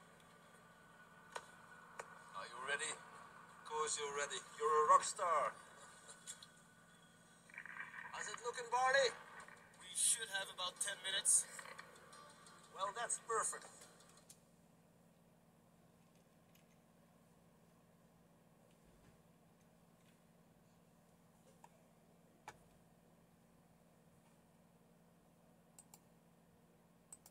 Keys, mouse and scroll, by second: 0.3 super+3, 2.0 super+4, 5.5 super+q, 8.1 super+3, 9.8 q, 13.4 super+2, 14.1 space, 16.5 shift+super+q, 19.4 super+1, 25.8 click, 27.1 click.